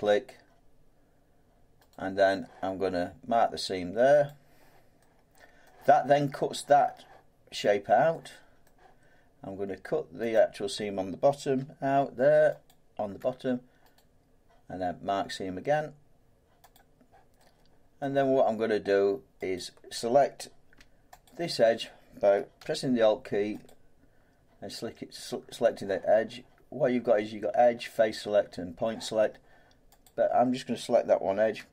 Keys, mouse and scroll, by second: 1.9 right click, 4.2 click, 5.0 scroll, 5.5 scroll down 2, 5.6 scroll up 1, 5.7-6.0 scroll down 1, 8.1 scroll down 1, 8.2 middle click, 8.6 middle click, 10.3 click, 12.7 alt+click, 14.0 right click, 16.7 click, 18.0 middle click, 19.6 click, 21.3 alt+click, 23.7 click, 30.0 click.